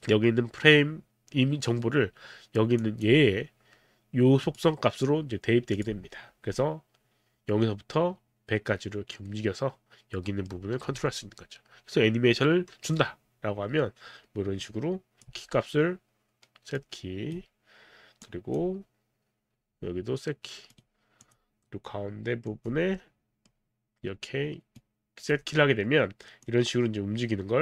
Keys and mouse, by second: 2.8 click, 4.5 click, 5.7 click, 6.6 middle click, 14.7 click, 15.3 d, 16.7 right click, 18.3 click, 20.7 right click, 21.2 click, 22.5 click, 23.0 middle click, 24.7 right click, 26.5 click.